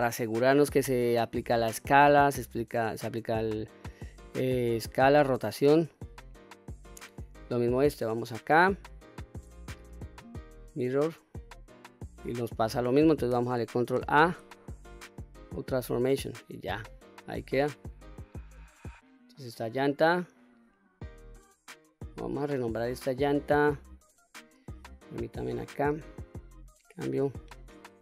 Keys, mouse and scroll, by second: 0.0-1.4 scroll up 1, 3.6 click, 4.5-7.4 middle drag, 8.6-10.3 drag, 11.8-12.4 middle drag, 13.9 ctrl+a, 16.4-16.9 middle drag, 17.1-17.5 scroll down 1, 17.5 click, 18.6 click, 22.0 click, 22.2-28.0 drag.